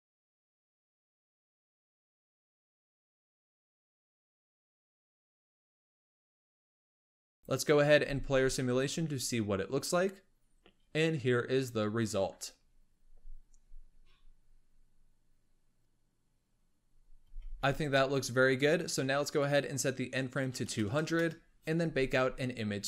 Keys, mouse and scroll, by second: 0.2 i, 1.2 click, 1.9 g, 2.6 i, 3.7 click, 4.2 r, 6.1 i, 7.3-7.9 drag, 7.9 space, 17.2 space, 19.3-20.8 drag, 20.8 KP_0.